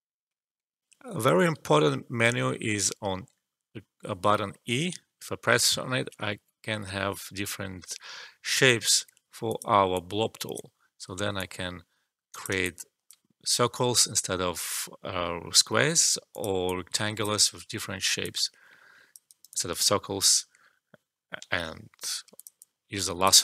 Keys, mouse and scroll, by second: 0.8 alt+F12, 4.9 e, 9.4-11.3 drag, 11.3 alt+click, 12.5 click, 13.6 e, 16.3-18.2 drag, 18.2 alt+click, 19.2 alt+right click, 19.5 alt+click, 21.3 e, 22.3 click.